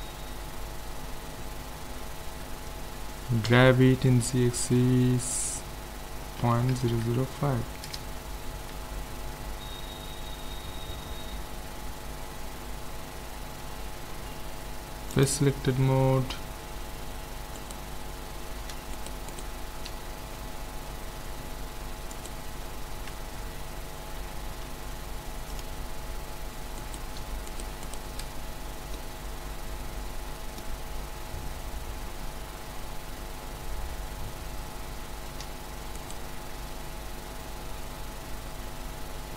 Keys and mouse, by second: 3.4 g, 9.5 Tab, 10.2-15.2 middle drag, 12.4 Tab, 14.1 ctrl+Tab, 17.6-21.0 right drag, 21.0-22.1 middle drag, 22.1-23.9 right drag, 24.6 ctrl+Tab, 26.8-28.9 right drag, 28.9-30.0 middle drag, 30.1 middle click, 36.0-37.7 right drag, 37.7 middle click.